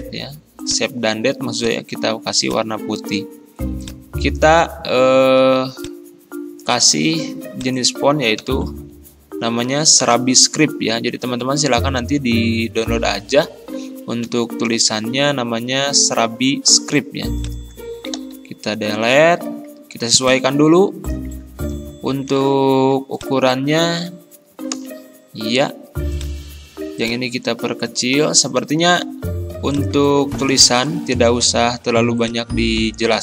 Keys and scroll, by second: 8.4 s, 8.8 r, 11.5 ctrl+], 18.2 Delete, 21.8 ctrl+[, 24.8 shift+Return, 28.2 ctrl+[, 30.6 Delete.